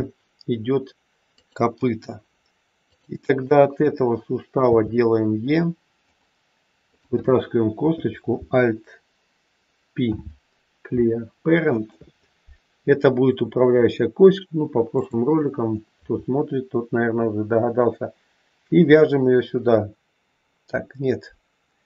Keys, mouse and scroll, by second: 2.8 click, 4.5 e, 6.8 click, 10.0 alt+p, 13.3-13.7 scroll up 3, 14.9 shift+click.